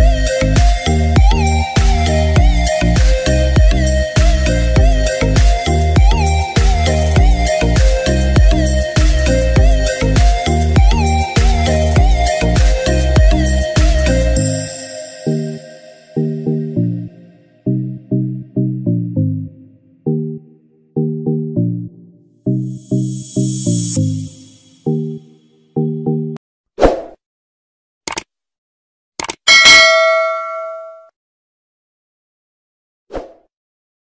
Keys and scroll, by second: 0.7 Escape, 2.2 ctrl+j, 8.1 v, 9.0 v, 19.4-19.9 typing.